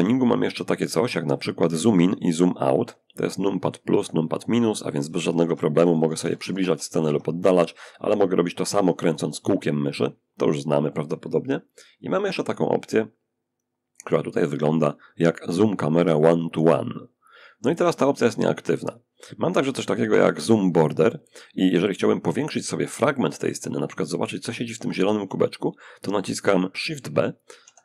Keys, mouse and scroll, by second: 4.3 -, 4.5 -, 6.0 -, 6.1 -, 6.3 -, 7.9-10.5 middle drag, 11.3 click, 22.8-24.1 shift+drag, 26.9 shift+b.